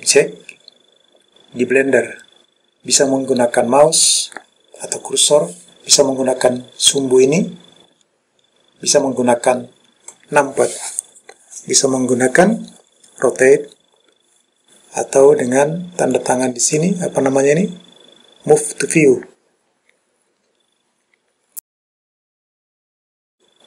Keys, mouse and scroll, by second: 16.2 click, 19.0-23.6 drag.